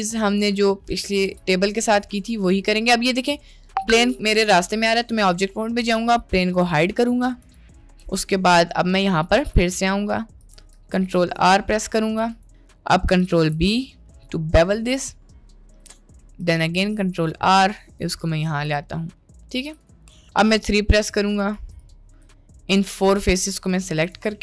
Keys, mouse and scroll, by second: 1.1 KP_Decimal, 1.5-2.5 middle drag, 2.9-4.3 middle drag, 4.3 Tab, 4.5-5.1 middle drag, 6.6 h, 7.1 middle click, 8.0 Tab, 8.3 middle click, 8.8-10.2 middle drag, 10.5 click, 10.9 ctrl+r, 12.5 middle click, 13.4 ctrl+b, 16.7 ctrl+r, 18.9 middle click, 19.7 g, 20.9 2, 21.2 click, 21.5 3, 21.8 click.